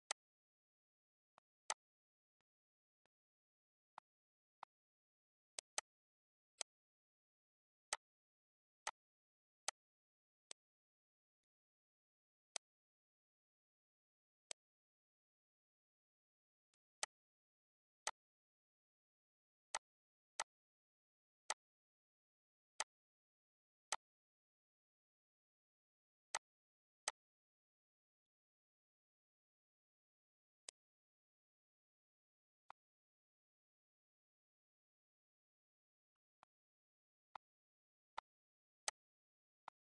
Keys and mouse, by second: 0.5 click, 1.5 click, 2.1 click, 3.1 click, 3.8 click, 4.6 click, 5.2 ctrl+s, 5.6 click, 6.8 ctrl+g, 7.1 click, 7.9 ctrl+g, 8.1 click, 8.7 ctrl+g, 9.0 click, 9.8 click, 10.4 ctrl+g, 10.7 click, 11.5 ctrl+g, 11.8 click, 12.3 ctrl+s, 13.7 click, 15.8 click, 17.0 click, 18.6 click, 19.3 click, 20.5 click, 21.6 click, 22.8 click, 25.5 click, 26.3 click, 27.6 click, 30.1 click, 32.0 click, 35.5 click, 36.7 click, 37.5 click, 38.2 click, 39.0 click.